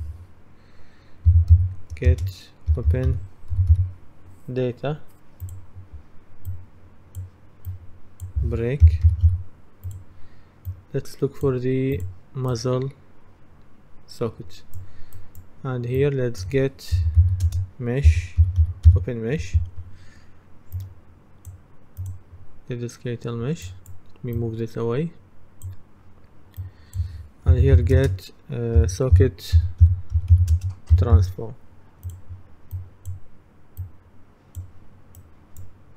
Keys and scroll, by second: 1.1-4.3 typing, 8.6-9.8 typing, 16.8-19.4 typing, 27.3-31.7 typing.